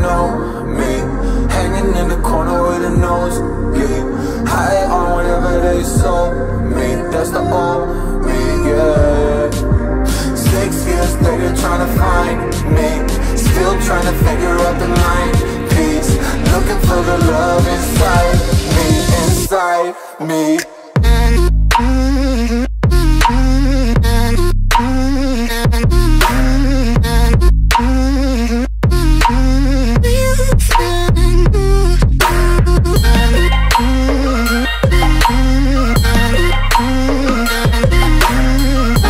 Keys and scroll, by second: 12.8 Return, 13.5 ctrl+[, 22.8 Return, 25.0 ctrl+t, 27.5 Return, 30.0 space, 36.9 ctrl+t.